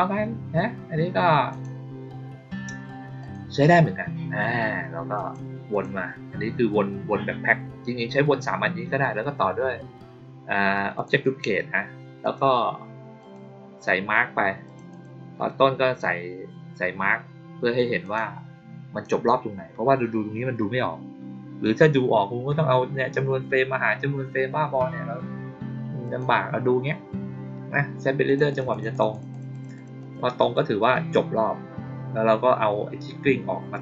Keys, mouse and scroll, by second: 1.4 click, 3.1 click, 5.1 click, 5.6 click, 10.9 click, 12.1 click, 13.1 click, 14.6 click, 14.8 click, 17.9 click, 25.9 click, 28.2 click, 28.4 click, 28.6 click, 28.8 click, 29.0 click, 29.2 click, 29.4 click, 29.6 click, 29.9 click, 30.3 click.